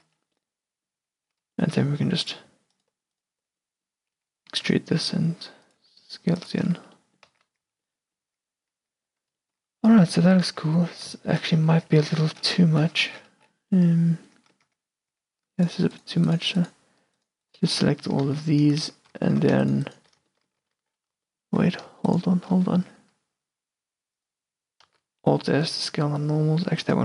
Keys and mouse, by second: 0.1 Tab, 1.1 Tab, 3.8 middle click, 4.3 e, 4.7-5.8 drag, 4.7 s, 5.9 g, 6.8 Tab, 7.1 click, 7.4-9.8 typing, 8.0 click, 10.8 Tab, 11.7 a, 12.0 q, 12.5-13.5 middle drag, 14.8 Tab, 15.3 Tab, 18.4 ctrl+z, 20.5 middle click, 20.8 ctrl+z, 21.6-22.8 middle drag, 23.1 s, 25.0 alt+s.